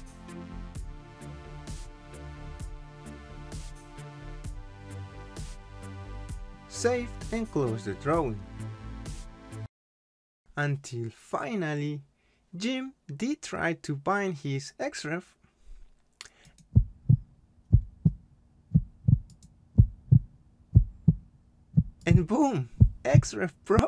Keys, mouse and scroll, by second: 4.1 click, 8.3 click, 9.8 click, 12.5 click, 15.6 click, 16.4 right click, 19.3 click.